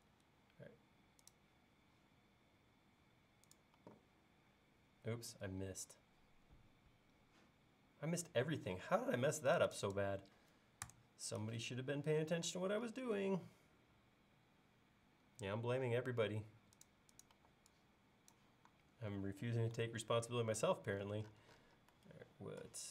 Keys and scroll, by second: 0.1 Up, 3.8 e, 8.9 space, 10.9 BackSpace, 13.2 l, 17.4 e, 19.9 super+z.